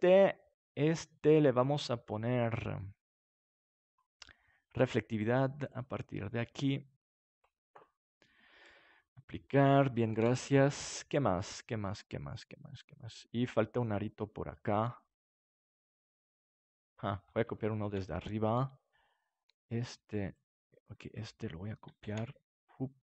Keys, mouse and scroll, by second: 3.5-8.6 drag, 9.4-11.0 drag, 10.1 ctrl+s, 11.0-12.8 middle drag, 16.9-19.4 middle drag, 19.4-20.5 right drag, 22.0 shift+d.